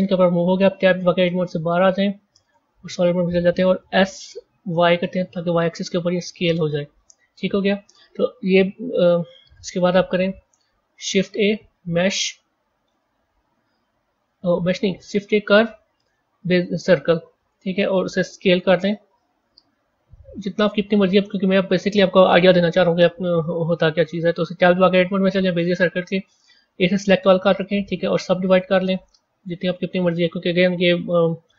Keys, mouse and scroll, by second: 0.7 Tab, 1.1-2.4 scroll up 8, 2.4 z, 3.9 s, 7.2-10.2 scroll down 3, 10.7 shift+a, 18.3 s, 22.8-24.5 middle drag, 24.5 Tab, 26.3 a, 26.5 a, 27.4-30.9 right drag, 30.9 Tab.